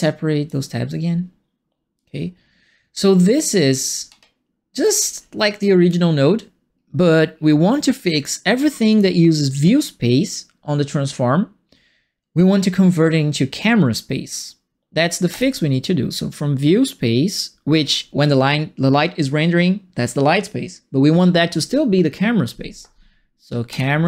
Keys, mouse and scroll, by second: 1.9-2.9 drag, 4.0 middle click, 4.8 right click, 5.1 middle click, 5.5 right click, 7.2 middle click, 7.9 right click, 8.9 click, 15.3 click, 23.7 click.